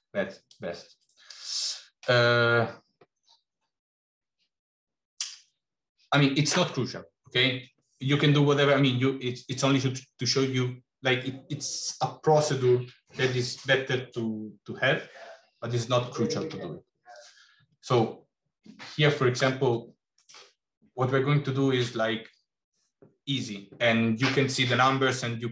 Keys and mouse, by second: 17.9-19.2 middle drag, 19.6 middle click.